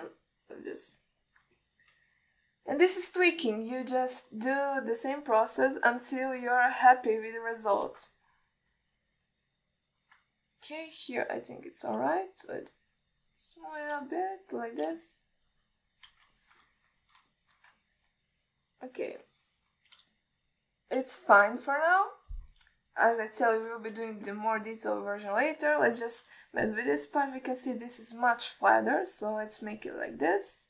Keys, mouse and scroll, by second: 0.7 middle click, 1.3 click, 2.2 middle click, 3.2 KP_1, 4.0-5.2 drag, 5.9-7.9 shift+drag, 8.2 shift+click, 9.4-11.2 middle drag, 11.7 alt+middle click, 12.2 ctrl+alt+middle click, 13.4-15.2 shift+drag, 15.5 alt+middle click, 16.2-17.3 shift+drag, 17.7 ctrl+middle click, 18.0 alt+middle click, 18.6 alt+shift+middle click, 19.1 ctrl+alt+middle click, 20.6 alt+shift+middle click, 21.4 shift+click, 22.9-23.5 shift+middle drag, 24.5 KP_1, 25.3 ctrl+alt+middle drag, 25.9-26.6 alt+shift+middle drag, 27.0 ctrl+alt+middle click, 27.7-30.6 shift+drag.